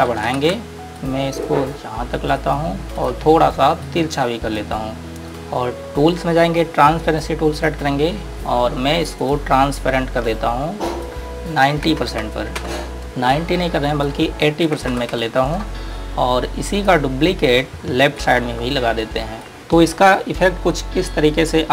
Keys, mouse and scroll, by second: 0.8 typing, 0.9 click, 12.0 KP_9, 12.9 KP_Enter, 14.2 click, 14.9 KP_8, 15.4 KP_Enter, 17.0 click, 18.5 right click, 19.6 click.